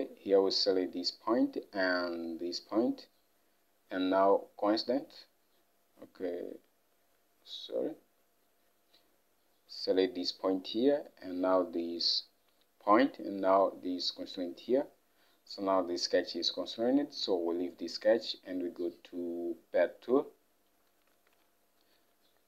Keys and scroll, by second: 21.2 alt+Tab.